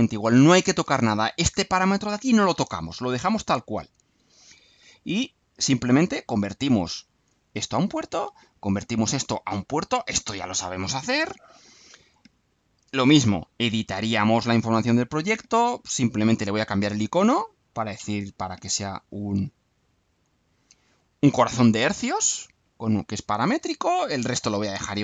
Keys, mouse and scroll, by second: 5.1 click, 6.5 click, 7.5 click, 8.5 click, 9.7 click, 10.7 click, 14.0 click, 16.3 click, 17.6 click, 18.9 alt+click, 20.2 click.